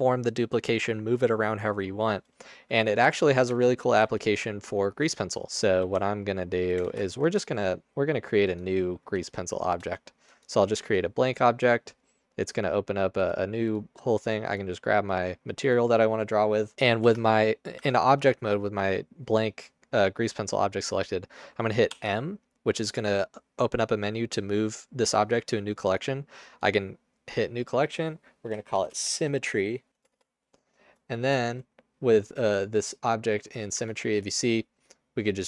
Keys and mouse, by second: 3.6 Tab, 4.1 a, 5.9 g, 7.0 ctrl+z, 7.2 Tab, 9.2 shift+a, 17.1 Tab, 17.8 Tab, 22.0 m, 29.0 BackSpace, 30.0 m, 30.2 Return, 31.4 Tab, 33.8 Tab.